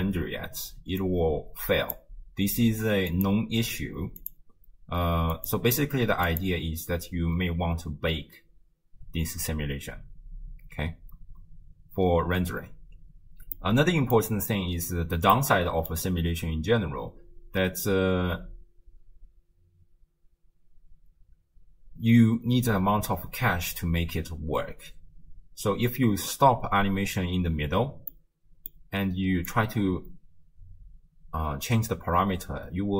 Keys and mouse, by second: 1.2 click, 3.1 click, 6.3 click, 13.6 middle click, 15.4 middle click, 18.3 space, 18.9 space, 28.2 middle click, 29.5-32.9 drag.